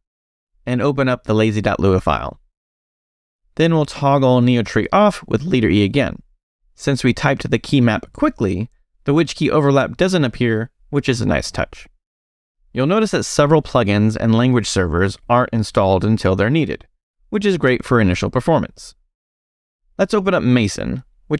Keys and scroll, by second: 1.9 j, 3.2 Return, 5.2 space, 5.3 e, 20.6 space.